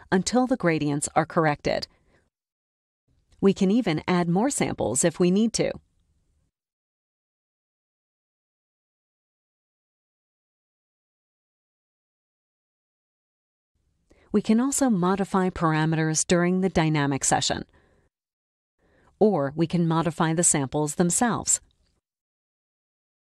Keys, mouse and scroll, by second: 0.5 click, 1.3 click, 4.1 click, 5.0 click, 5.3 click, 5.8 click, 6.3 click, 6.6 click, 7.0 click, 7.4 click, 7.8 click, 8.2 click, 8.5 click, 10.6 click, 12.1 click, 14.8 click, 15.6 KP_1, 15.9 Tab, 17.0 Tab, 17.4 KP_Decimal, 17.6 KP_1, 18.0 Tab, 18.1 click, 18.3 click, 19.2 click, 19.2-19.5 scroll up 2, 20.3 KP_2, 20.5 KP_5, 20.8 Tab, 21.8 click.